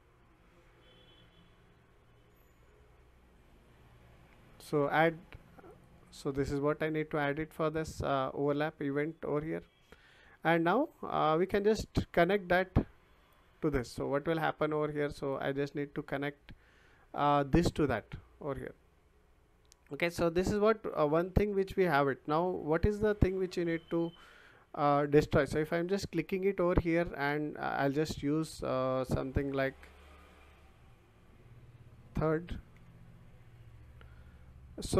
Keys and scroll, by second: 29.8-31.0 typing, 32.7 r.